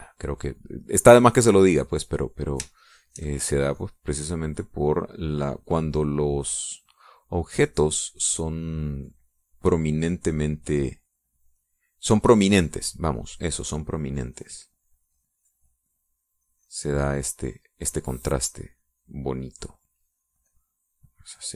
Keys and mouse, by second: 1.6 middle click, 2.2 click, 4.0 shift+click, 4.6-6.0 shift+drag, 7.2 click, 12.2 click, 14.2-19.2 drag, 20.3 click.